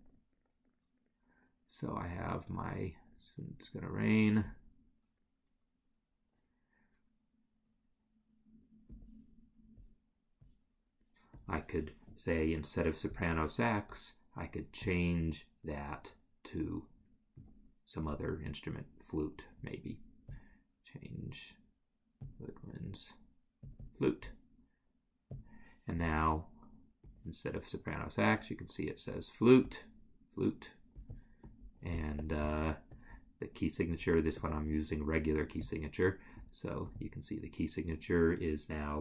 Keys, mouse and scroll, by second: 14.9 click, 20.4 click, 23.9 double click, 25.5 click, 29.2 shift+right click, 32.0 shift+right click, 35.7 click.